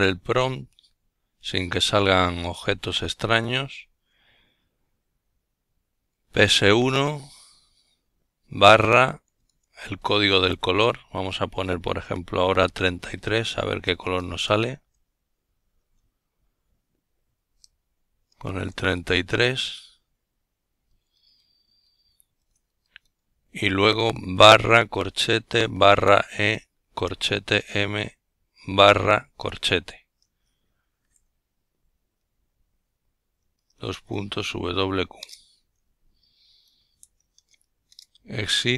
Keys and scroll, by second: 2.7 alt+i, 4.5 Down, 5.4 Up, 7.8 Delete, 8.1 3, 10.4 Right, 10.7 Right, 10.9 Right, 11.0 Right, 11.4 Right, 11.6 Right, 11.8 Right, 12.0 Right, 12.2 Right, 12.3 Right, 12.6 Right, 14.0 Right, 14.7 Right, 15.4 Right, 16.0-18.8 typing, 20.5 typing, 22.8-24.0 typing, 24.6 Return, 25.9-27.3 typing, 31.1 ctrl+alt+t, 34.4 a.